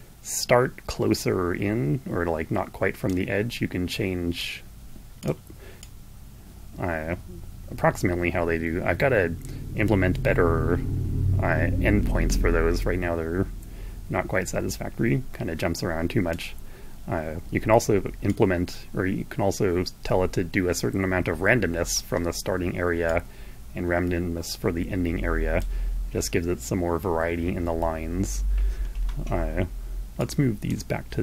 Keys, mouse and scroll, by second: 3.5 click, 4.9 click, 5.5-16.2 drag, 18.0-21.8 drag, 22.4-25.5 drag, 29.7 click, 30.9 click.